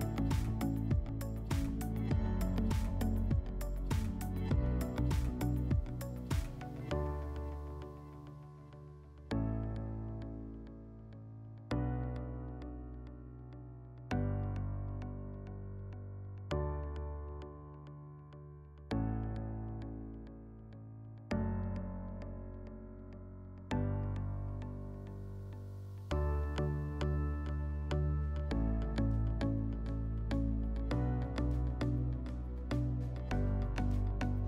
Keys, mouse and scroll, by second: 0.8 click, 1.7 right click, 1.9 w, 3.8 click, 5.1 click, 5.8 click, 7.4 click, 8.3 click, 18.1-20.1 drag, 20.7 click, 22.8 click.